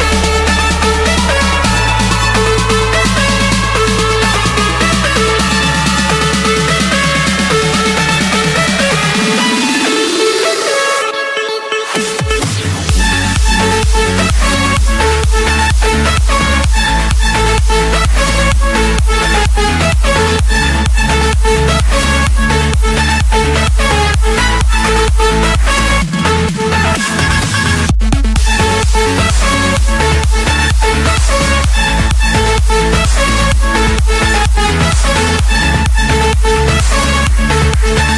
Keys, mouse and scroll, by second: 0.0-1.5 typing, 1.9 Return, 2.9 click, 3.5 click, 4.6 scroll, 4.8 Escape, 5.4 Escape, 6.5 click, 9.4 click, 11.6 click, 11.8-12.7 scroll, 13.0 click, 13.8 click, 21.9 click, 25.9 click, 27.0-27.4 typing, 27.7 Return, 29.6 click, 31.9 click, 33.2 click, 33.9 scroll, 35.2 click, 35.3 Escape.